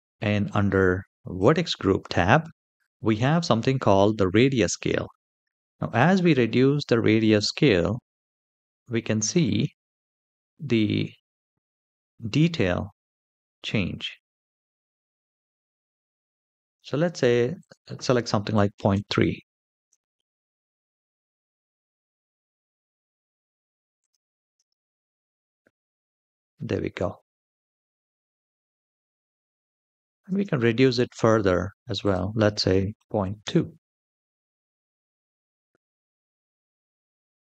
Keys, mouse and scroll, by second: 1.2 click, 2.2-4.1 scroll down 2, 4.1-5.5 scroll down 1, 5.7-9.1 drag, 11.0-13.0 scroll up 2, 13.0-16.6 drag, 17.3-18.7 drag, 19.9 shift+middle drag, 20.5-22.3 middle drag, 22.4-22.9 scroll down 3, 23.7 click, 24.3 space, 30.0 space, 31.7-33.2 drag, 34.7-35.7 scroll up 1, 35.7 click, 35.7 scroll up 1, 36.4 space.